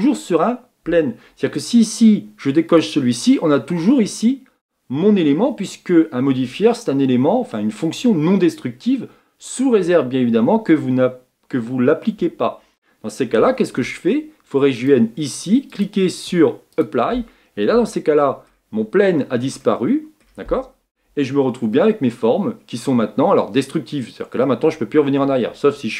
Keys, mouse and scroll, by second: 3.8-13.7 middle drag, 14.7 click, 16.8 click, 17.7-21.4 middle drag, 21.4 Tab, 21.8-24.4 middle drag, 24.4 Tab.